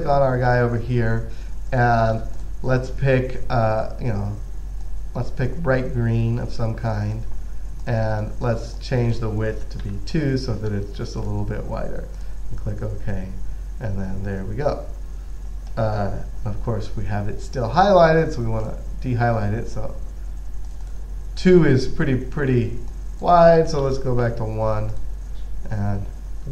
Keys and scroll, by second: 10.2 2, 24.1 1.